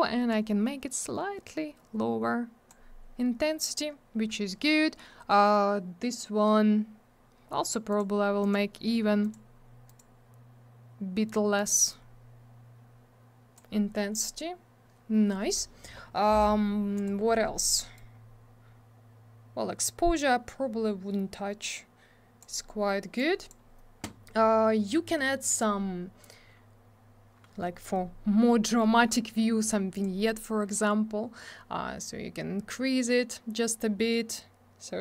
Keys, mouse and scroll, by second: 0.3 click, 7.9 click, 8.0 click, 8.4 click, 8.5 click, 9.2 click, 9.3 click, 9.9 click, 10.0 click, 11.5 click, 16.9 click, 17.0 click, 17.9 click, 23.2 click, 25.5 click, 25.5 click, 29.9 click, 30.0 click, 32.0 click.